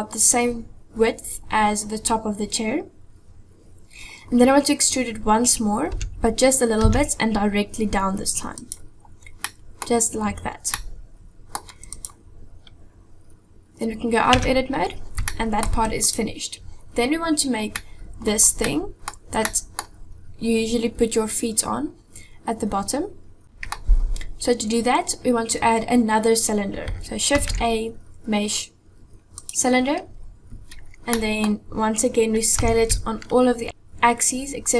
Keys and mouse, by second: 5.9 e, 9.5 middle click, 10.7 middle click, 12.0 click, 14.3 Tab, 15.3-15.6 shift+middle drag, 16.0 click, 17.8 middle click, 18.7 middle click, 19.5 middle click, 23.4 middle click, 23.4 KP_7, 27.4 shift+a, 31.2 middle click, 32.6 s.